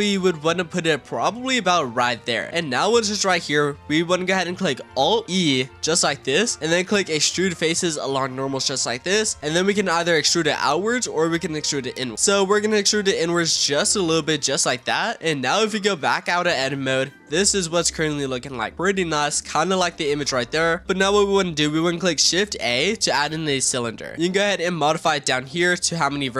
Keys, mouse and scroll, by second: 2.3-4.3 middle drag, 4.3-5.2 scroll up 1, 5.2 alt+e, 14.3 click, 15.3-15.6 middle drag, 15.6 Tab, 16.3-19.8 middle drag, 19.8-20.8 scroll down 1, 20.8-22.1 shift+middle drag, 22.4 shift+a, 24.1-24.4 scroll down 6, 24.7-25.5 drag, 25.5-26.3 middle drag.